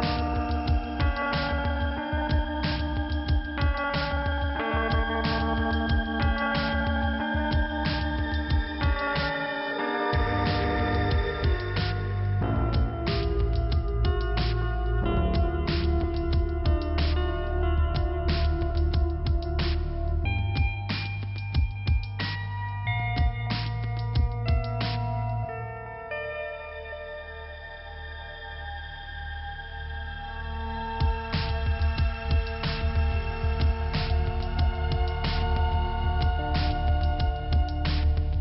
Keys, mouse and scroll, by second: 0.1 scroll up 1, 2.0 click, 3.9 click, 4.6-5.3 scroll down 1, 5.3-6.8 scroll up 2, 7.0 click, 8.7-9.2 scroll down 1, 9.4 scroll up 1, 13.0-14.1 scroll down 1, 14.1 click, 14.3 click, 14.4 double click, 16.9-17.6 scroll down 1, 17.6 scroll up 1, 22.2-23.0 scroll down 1, 24.6-24.9 scroll up 1, 26.4 click, 28.2 click, 28.7-29.5 scroll down 1, 30.7 click, 32.7-33.2 scroll down 1, 34.0 click, 36.8 click, 37.7-38.3 scroll down 1.